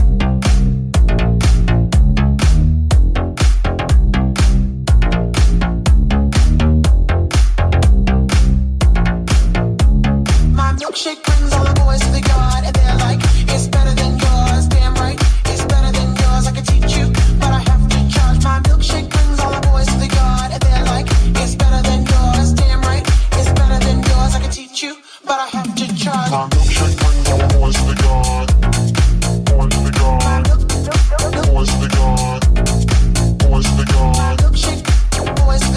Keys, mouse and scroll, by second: 4.6 ctrl+Tab, 5.5 middle click, 5.7 Tab, 8.2-16.4 ctrl+drag, 8.7 right click, 8.7 3, 9.0 right click, 9.2 right click, 10.3 right click, 10.5 shift+right click, 10.8 shift+middle click, 10.8 shift+right click, 11.5 middle click, 11.5 right click, 11.7 shift+middle click, 11.7 shift+right click, 11.9 shift+middle click, 11.9 shift+right click, 13.6 shift+middle click, 13.6 shift+right click, 16.4-25.2 middle drag, 17.7 g, 20.4 e, 21.2 g, 25.0 g, 25.0 2, 25.2 alt+right click, 25.2-28.0 alt+middle drag, 25.6 g, 28.0 right click, 28.0 3, 28.0 shift+middle click, 28.2 right click, 28.2 middle click, 28.5 right click, 28.7-32.1 middle drag, 29.5 e, 30.6 s, 31.5 ctrl+z, 32.1 right click, 32.2-35.7 middle drag, 32.7 right click, 33.3 e, 34.7 w.